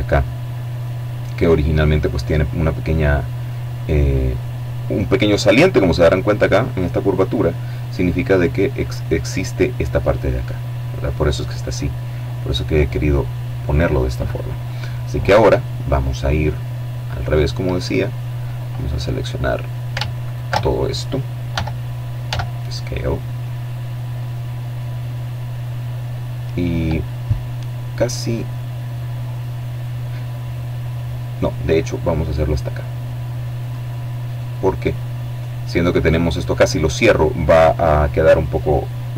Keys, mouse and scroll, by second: 7.4-8.8 middle drag, 9.3-9.8 scroll up 1, 9.8-10.4 scroll down 1, 10.4 middle click, 10.9-13.6 right drag, 17.8-18.6 scroll up 2, 19.3 alt+shift+right click, 20.5 e, 21.3 s, 32.7 click, 33.0 middle click.